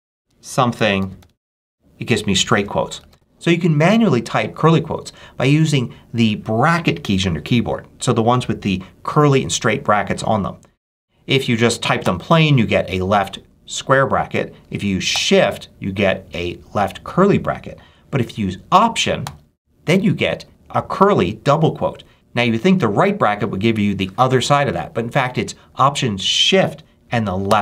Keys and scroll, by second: 0.0-2.0 typing, 2.9 super+a, 3.0 super+BackSpace, 11.9 [, 14.5 BackSpace, 15.0 shift+[, 17.7 BackSpace, 18.6 alt+BackSpace, 19.1 alt+[, 22.1 alt+BackSpace, 27.3 alt+shift+[.